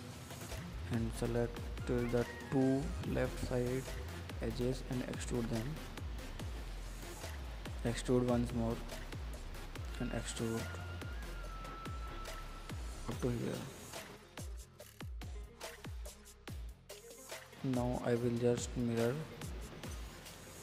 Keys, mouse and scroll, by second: 0.4 click, 0.7 scroll down 2, 1.5 middle click, 1.8-2.2 scroll up 3, 2.2-3.7 middle drag, 4.2 KP_7, 4.7-5.5 scroll up 3, 5.5 shift+middle click, 6.0-6.7 scroll up 1, 6.7 e, 9.7 e, 11.1 e, 13.8-15.3 drag, 16.1 scroll down 3, 16.3 middle click, 16.6-17.0 scroll down 3, 17.0 middle click, 17.5 scroll up 1, 17.5 middle click, 18.0 click, 18.3 middle click, 18.9 Tab, 19.1 middle click, 19.3 click, 19.4 click, 19.6-20.6 middle drag.